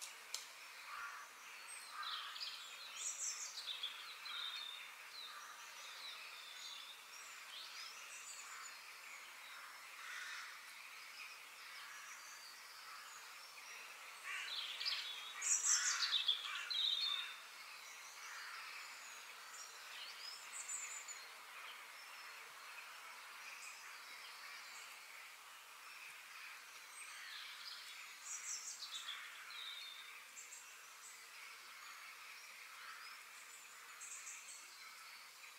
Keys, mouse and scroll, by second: 1.9-3.8 middle drag, 4.3-4.8 scroll up 2, 7.3 click, 19.1-20.7 middle drag, 20.7 click, 21.8 f, 26.5 middle click, 27.1-27.9 scroll up 2, 27.9-30.1 shift+middle drag.